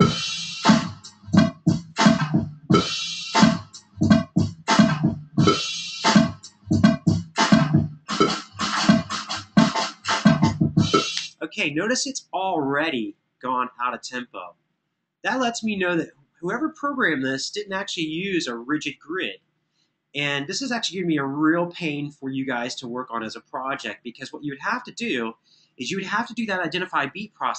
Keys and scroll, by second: 10.9 space.